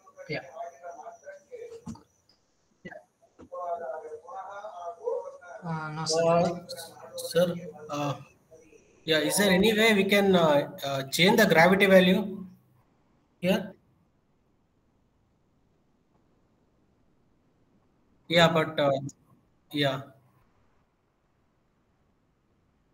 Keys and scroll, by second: 0.6 w.